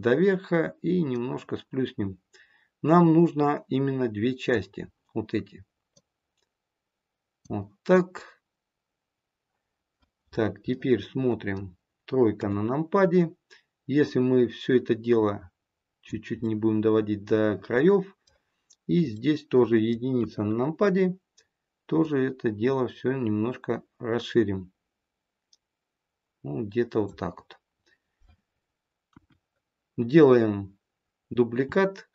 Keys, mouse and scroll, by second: 1.0 click, 5.8 click, 10.7 middle click, 12.4 KP_3, 13.9 click, 16.4 middle click, 17.9 middle click, 20.1 KP_1, 21.9 click, 29.0 KP_1.